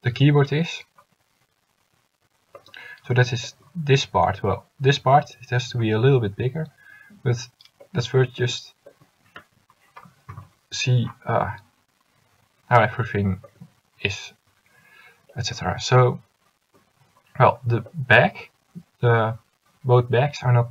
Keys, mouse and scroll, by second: 8.5 a.